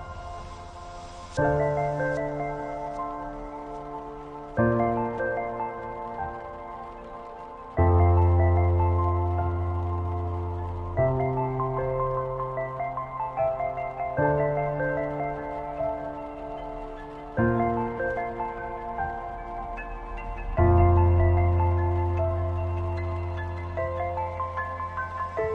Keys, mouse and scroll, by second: 2.3 click, 3.2-5.9 alt+drag, 5.9 t, 6.6 click, 7.6 BackSpace, 8.7 click, 9.3-10.8 typing, 12.9-15.4 typing, 17.4-25.5 drag.